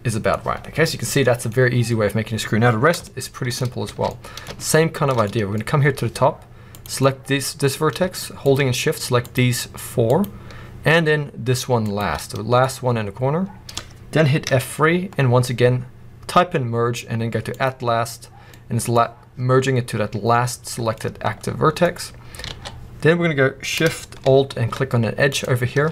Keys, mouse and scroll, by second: 1.0-1.4 scroll down 1, 1.4 middle click, 2.9 shift+middle click, 3.5 scroll up 1, 3.7 alt+a, 4.0 middle click, 4.5 shift+middle click, 5.2 scroll up 3, 5.4-6.6 middle drag, 6.6 click, 6.9 middle click, 7.1 middle click, 8.3 shift+click, 9.1 shift+click, 10.0 shift+click, 11.8 shift+click, 12.1 middle click, 12.3 middle click, 14.4 F3, 16.0-18.3 middle drag, 18.3 scroll down 2, 18.5-20.9 middle drag, 19.1-20.8 scroll up 2, 21.5-22.5 middle drag, 21.8-22.3 scroll up 2, 22.3 z, 22.5 q, 25.2 alt+shift+click.